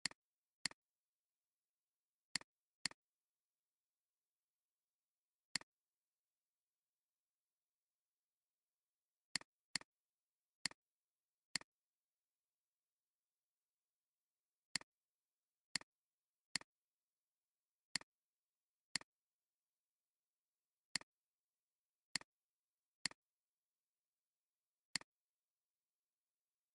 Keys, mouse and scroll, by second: 3.4 alt+scroll up 1, 8.6 alt+scroll down 1, 9.5 space, 9.7 double click, 15.2 alt+scroll down 1, 15.6 space, 17.2 Down, 17.3 Down, 17.5 Down, 18.5 alt+scroll, 18.7 alt+scroll down 1, 20.4 alt+scroll up 1, 21.3 space, 21.7 alt+scroll down 1, 22.9 space, 24.8 space.